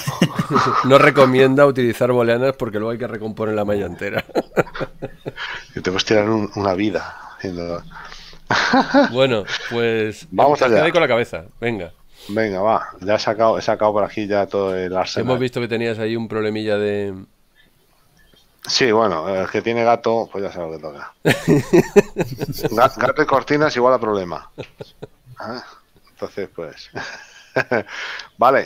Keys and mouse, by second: 11.2 KP_7, 17.2 click, 18.2 click, 20.9 shift+middle click, 27.5 middle click.